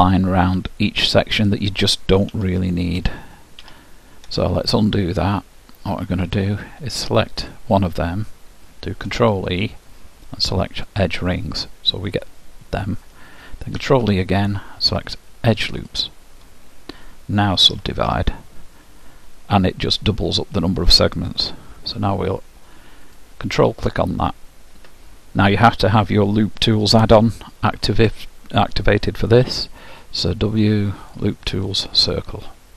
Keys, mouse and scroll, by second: 2.3 ctrl+z, 3.1 ctrl+z, 3.7 ctrl+z, 6.3-9.2 drag, 9.1 ctrl+e, 13.8 ctrl+e, 17.7 w, 23.1-25.0 drag, 29.5 w.